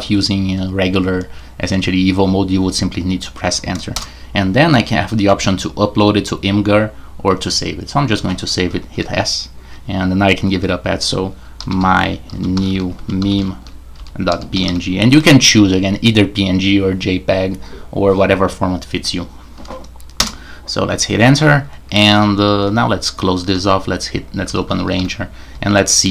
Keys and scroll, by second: 3.9 Return, 8.9 typing, 11.4-15.1 typing, 20.2 Return, 23.0 super+q, 23.5 super+r, 24.1-26.0 typing.